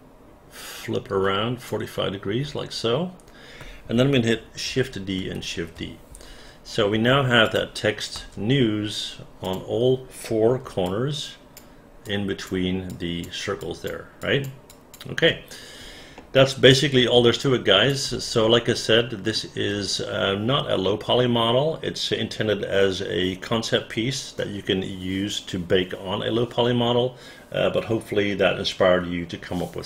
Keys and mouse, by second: 4.7 shift+d, 7.4 click, 8.1 space, 9.4 click, 10.8 alt+click, 12.0 alt+click, 12.9 alt+click, 13.6 alt+click, 14.2 alt+click, 14.7 alt+click, 16.1 alt+middle click, 16.7-17.9 alt+drag, 18.5 alt+middle click.